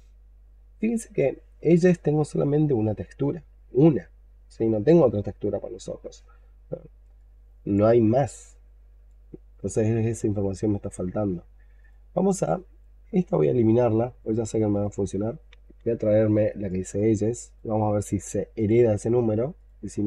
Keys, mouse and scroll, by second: 13.4 right click.